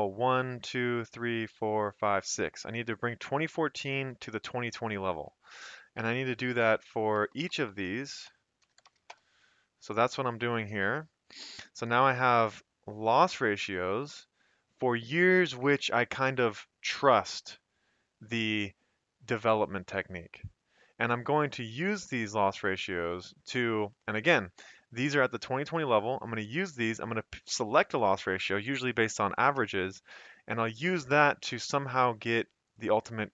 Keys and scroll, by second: 5.2 Escape, 6.7 ctrl+c, 7.1 shift+Down, 8.4-9.5 typing, 11.9 Escape.